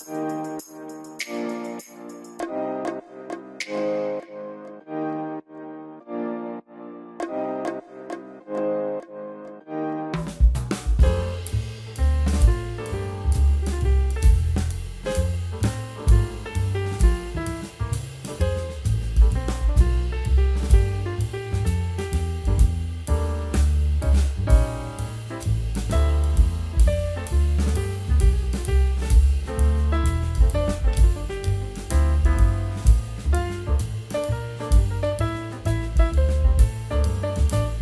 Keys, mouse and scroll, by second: 0.6 Delete, 1.4 shift+click, 4.8-7.3 scroll up 1, 7.3 scroll down 1, 9.1 double click, 11.2 scroll up 1, 12.9 Delete, 13.5 scroll down 1, 13.9 middle click, 17.0-17.5 scroll up 1, 18.1 scroll down 1, 19.2 middle click, 19.9 right click, 20.9 middle click, 22.5 ctrl+click, 23.7 ctrl+g, 25.0 ctrl+z, 25.8 right click, 27.3 double click, 31.4 scroll up 1, 31.8 middle click, 33.1 scroll up 1, 33.4 right click, 34.8 scroll up 1, 35.2 F3, 35.9 scroll down 1, 36.4 F4, 37.0 alt+middle click.